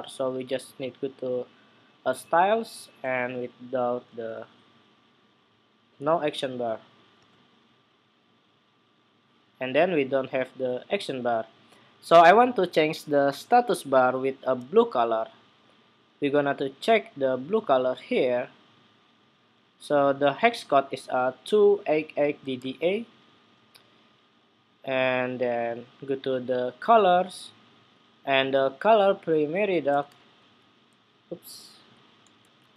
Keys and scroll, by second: 22.4 super+c, 29.8 super+space, 30.0 super+v, 32.1 super+v.